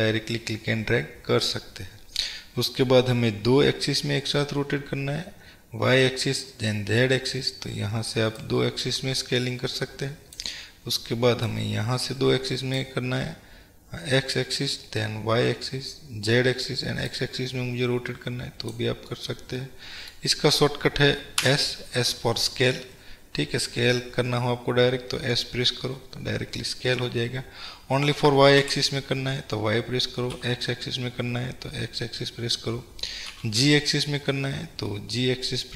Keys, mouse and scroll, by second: 8.6-19.2 drag, 19.2-35.7 middle drag, 21.5 s.